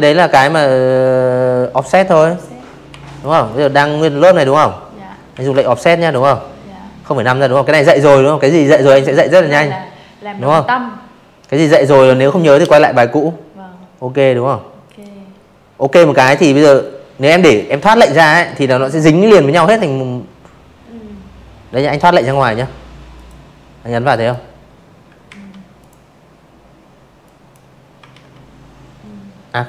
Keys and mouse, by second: 0.1 click, 0.4 click, 2.2 ctrl+q, 11.7 click, 19.0 click, 20.0 click, 21.0 drag, 22.2 ctrl+z, 22.7 click, 24.1 drag, 25.0 ctrl+z, 27.9 click, 28.6 ctrl+z.